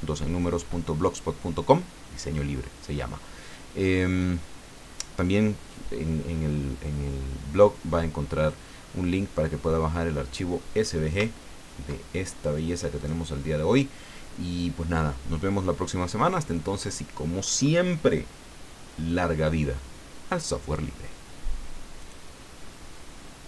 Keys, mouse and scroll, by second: 11.3-11.8 ctrl+scroll down 4, 13.0 click, 22.0 click.